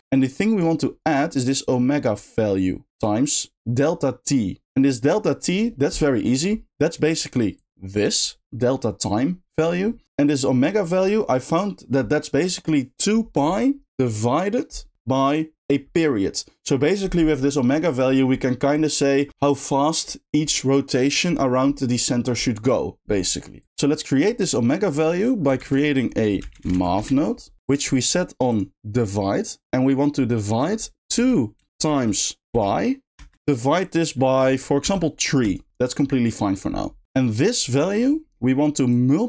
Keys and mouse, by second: 0.1 click, 6.2 middle click, 7.0 middle click, 7.6-9.5 drag, 23.6 click, 28.5-30.0 drag, 30.0 middle click, 30.8-33.2 drag, 33.6-35.4 drag, 37.0 middle click, 37.1 click, 38.4 middle click, 39.0 click.